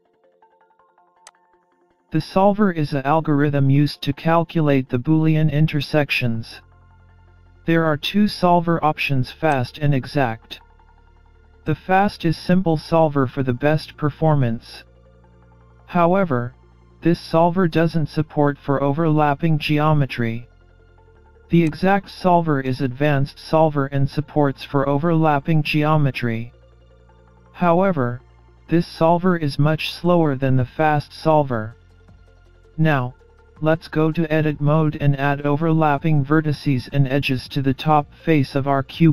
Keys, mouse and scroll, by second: 2.2-3.4 scroll up 1, 3.4 click, 5.8-6.3 scroll up 1, 6.3 middle click, 13.1 click, 15.3 click, 23.7 click, 25.3 click, 35.6 click.